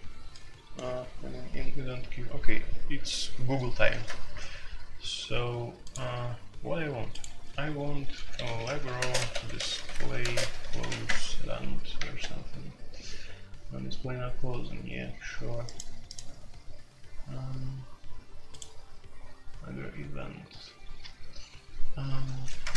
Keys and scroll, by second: 3.9 shift+#, 8.1-10.9 typing, 11.0 Return, 22.6 ctrl+g, 22.6 ctrl+t.